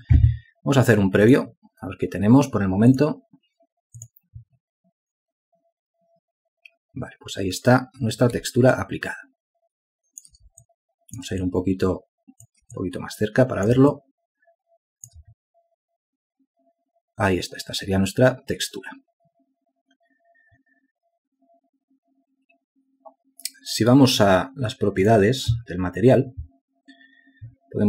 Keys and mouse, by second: 10.7 ctrl+alt+click, 12.6 shift+click, 13.4 ctrl+click, 15.9 shift+click.